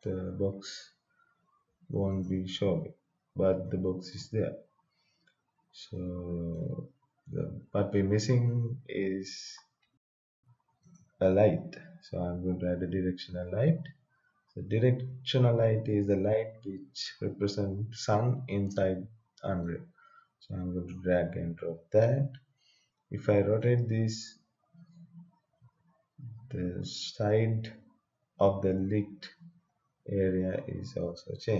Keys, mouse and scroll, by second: 0.8-2.0 scroll down 1, 2.1 click, 3.7 right click, 4.6-5.1 scroll up 2, 5.9 right click, 6.8-9.1 scroll down 1, 10.8 click, 19.6-23.6 drag, 23.6-31.5 drag.